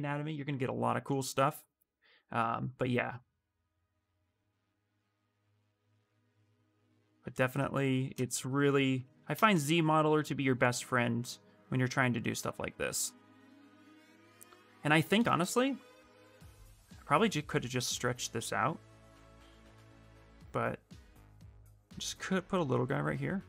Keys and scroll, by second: 20.0 q.